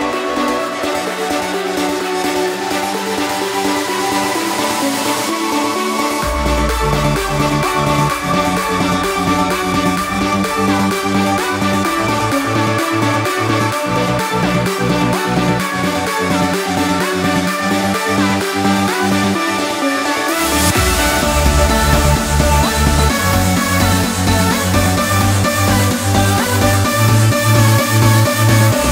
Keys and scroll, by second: 17.4 ctrl+z, 26.9 ctrl+d.